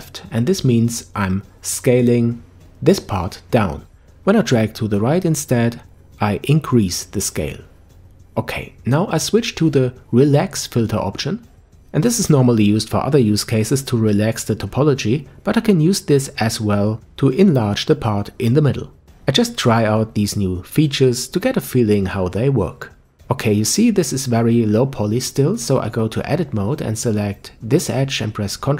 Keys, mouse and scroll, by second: 1.9-3.7 middle drag, 3.7-6.5 scroll up 1, 6.5 scroll up 1, 9.2-12.2 drag, 20.4 alt+m, 22.0-23.7 middle drag, 23.7 Tab, 24.2-25.5 scroll up 1, 25.5 click, 25.7 click, 27.0 ctrl+b.